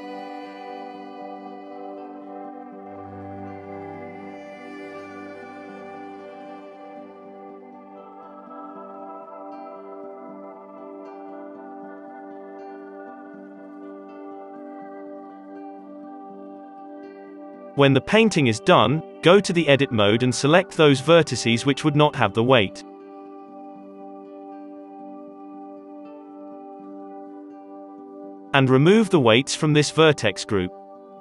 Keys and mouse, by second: 5.5-6.5 drag, 5.5 f, 6.5 middle click, 6.6 click, 6.6 f, 7.4 middle click, 7.9-9.0 drag, 9.2 ctrl+z, 9.2-10.6 middle drag, 9.6 f, 10.1 ctrl+z, 10.1-12.3 drag, 10.1 ctrl+z, 11.4-13.4 middle drag, 12.4 Tab, 12.5 Tab, 13.4 Tab, 13.4-15.4 drag, 15.2 f, 15.4 middle click, 15.5 click, 16.3 middle click, 16.3 f, 16.3-18.5 drag, 16.9 f, 17.8 Tab, 18.4 Tab, 18.5 middle click, 19.3-20.6 drag, 19.8 KP_3, 20.2 Tab, 20.6 3, 22.3 h, 24.3 ctrl+l, 24.3 h, 24.6 h, 25.7 ctrl+l, 25.7-27.0 drag, 25.9 alt+h, 27.0 ctrl+KP_Add, 27.0-28.2 middle drag, 27.2 KP_5, 28.2 click, 29.7 Tab.